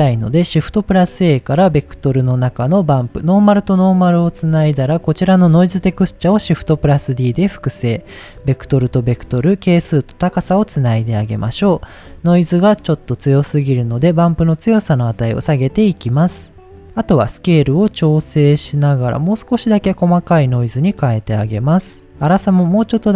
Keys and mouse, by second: 2.3 middle click, 3.0-3.9 drag, 4.3 middle click, 5.0 click, 5.8 shift+d, 6.6 click, 7.4-8.5 drag, 9.1-9.9 drag, 10.3 click, 10.9 middle click, 13.5-16.3 drag, 17.5-21.0 drag, 21.9 click, 22.3-23.1 drag.